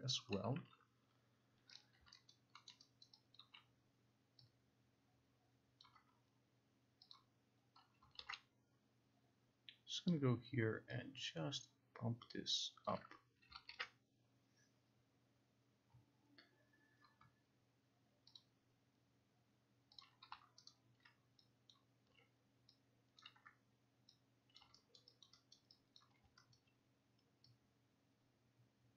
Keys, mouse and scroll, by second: 1.9 click, 2.4 alt+right click, 2.8 alt+middle click, 3.1 alt+right click, 3.5 alt+click, 6.0 click, 7.2 click, 8.1 click, 8.3 ctrl+z, 13.0 click, 13.6 click, 18.5 click, 20.1 click, 20.8 alt+right click, 21.8 click, 23.3 click, 24.7 click, 25.1 alt+right click.